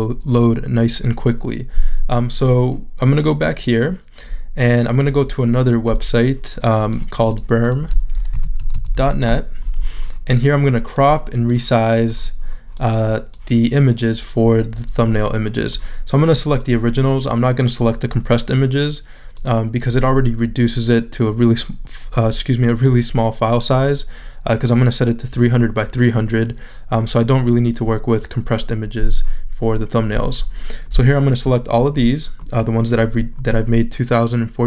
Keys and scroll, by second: 8.1-9.4 typing.